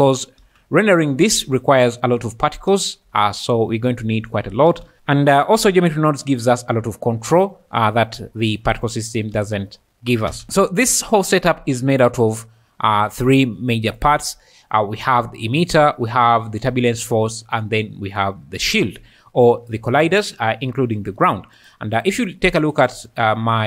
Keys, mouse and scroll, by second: 10.4 x.